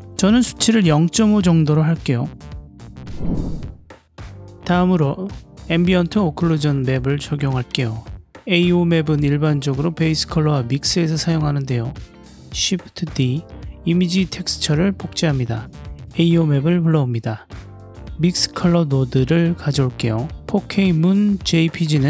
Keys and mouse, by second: 0.1-1.2 drag, 2.3 click, 4.0 click, 5.5-6.7 ctrl+middle drag, 9.3 drag, 10.4 middle click, 10.8 click, 11.3 middle click, 11.9 click, 14.7-16.0 drag.